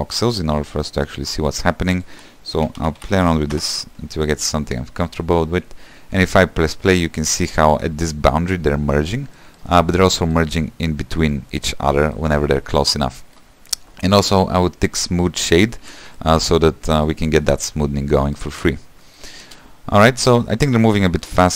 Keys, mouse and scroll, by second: 0.0 click, 0.9-3.8 shift+middle drag, 3.8 click, 4.6 shift+middle click, 5.0 space, 7.5 scroll up 2, 7.7 space, 8.0 shift+middle click, 8.3-8.8 scroll up 3, 8.8-11.8 middle drag, 11.8-12.2 scroll down 1, 12.2 middle click, 12.7-13.2 scroll down 3, 13.2-15.7 middle drag, 15.7 click, 16.1 =, 16.4 shift+middle click, 17.2 click, 17.7 click, 18.4 middle click, 18.8 =, 19.0 scroll down 1, 19.3 middle click, 19.7 space, 20.5 space.